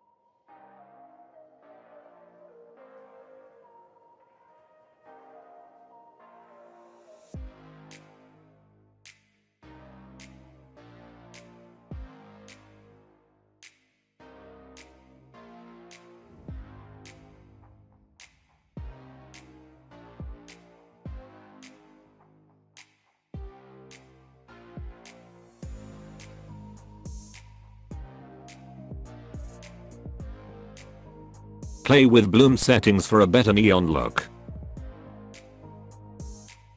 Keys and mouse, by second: 0.2-0.9 middle drag, 1.1 g, 2.6-3.7 middle drag, 4.5 KP_0, 6.1 g, 8.7-12.0 drag, 12.8 g, 14.8 middle click, 15.0 g, 15.3 middle click, 15.5 KP_0, 16.2 g, 19.1 shift+d, 19.8 middle drag, 19.9 g, 20.3 middle drag, 20.6 KP_0, 23.8 g, 25.5 alt+a, 25.7 middle click, 26.1 KP_0, 27.6 click, 28.6 click, 28.8 click, 29.3 alt+a, 31.0 click, 31.3 click, 34.3-36.7 drag.